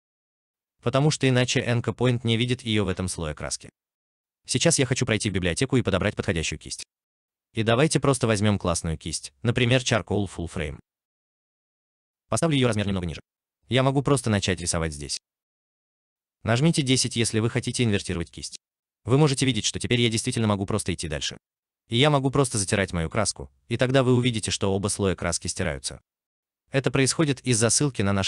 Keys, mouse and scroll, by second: 9.8 double click, 10.9 double click, 17.0 x, 20.7 alt+middle click, 25.4 alt+middle click, 25.7 alt+right click.